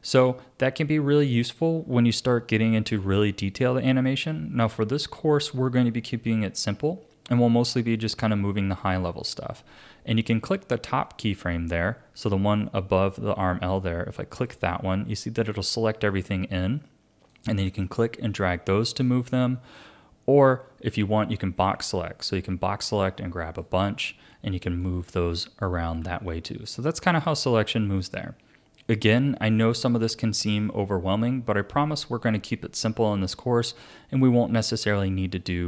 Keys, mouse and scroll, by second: 14.3 click, 17.3-20.4 drag, 20.9 a, 22.3-26.0 drag, 26.0 ctrl+z, 29.8 click.